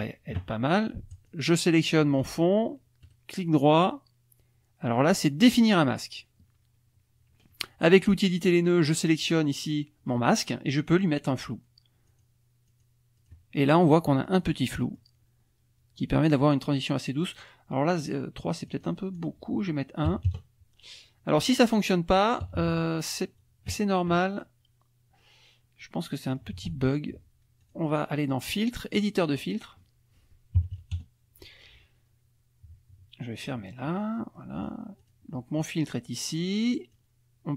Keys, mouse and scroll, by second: 1.1 shift+click, 3.0 right click, 5.7 click, 8.0 click, 8.8 click, 12.1 click, 12.7 click, 13.2 click, 13.9-15.2 middle drag, 18.7 click, 19.2 click, 20.1 KP_1, 20.3 KP_Enter, 21.4 click, 22.4 KP_Subtract, 25.8 middle click, 27.6 click, 28.9 click, 30.6 KP_Subtract, 31.0 KP_Add, 33.4 click, 34.4 click, 35.0 click, 36.9-37.5 drag.